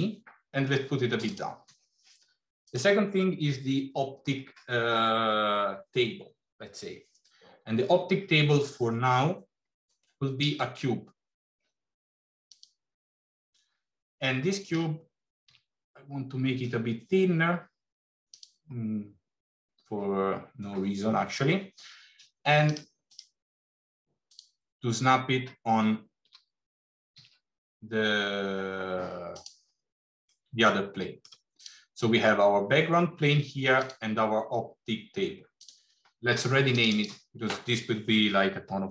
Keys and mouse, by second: 10.4 shift+a, 14.6 s, 22.8 click, 23.1-24.7 drag, 26.2 g, 30.2-31.1 middle drag, 31.4 click, 33.6 click, 36.7 click, 37.0-38.9 drag.